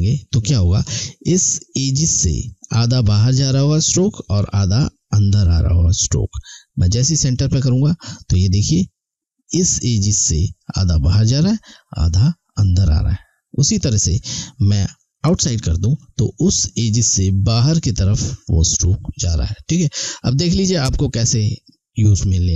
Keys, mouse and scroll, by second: 7.3 click, 13.7 click, 20.1 click.